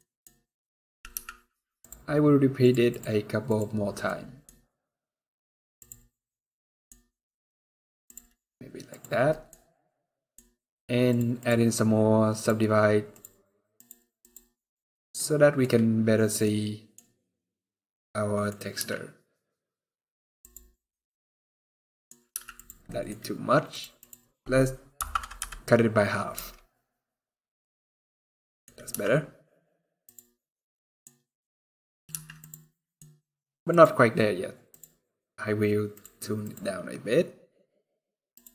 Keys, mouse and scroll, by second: 6.1 middle click, 6.7 scroll down 1, 7.8 click, 8.6 click, 9.0 middle click, 9.3-9.7 scroll up 1, 9.9 middle click, 10.8 click, 11.1 click, 14.9 middle click, 16.1 scroll down 1, 16.2 middle click, 16.7 scroll up 3, 17.2 scroll down 3, 17.3 middle click, 18.5 z, 21.0 middle click, 22.0 z, 22.6 middle click, 23.4 click, 27.5 scroll up 1, 28.0 middle click, 28.6 z, 30.4 middle click, 30.9 scroll up 3, 31.4 scroll down 2, 31.8 z, 32.5 middle click, 32.7 scroll down 2, 33.4 click, 34.4 click, 38.1 click.